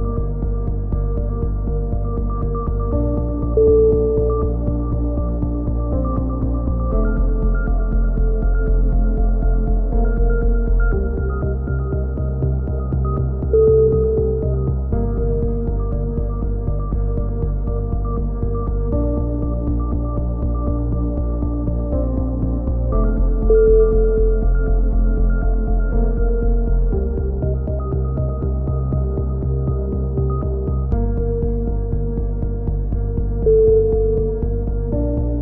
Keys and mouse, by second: 2.3 click, 3.0 t, 3.7 c, 6.8 right click, 7.5 a, 8.3 middle click, 9.6-11.8 middle drag, 11.8 click, 12.6-14.1 middle drag, 14.1 click, 14.9 c, 20.4 click, 21.0 click, 21.3 middle click, 21.4 click, 22.3 t, 23.0 click, 31.9 t, 32.7 click, 33.3 z, 34.0 right click, 35.3 a.